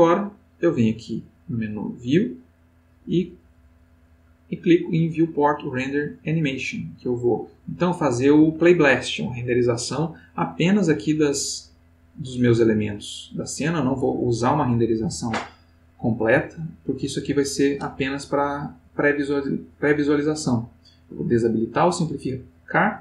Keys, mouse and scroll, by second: 1.0 click, 3.7 click, 19.2 click, 20.9 click.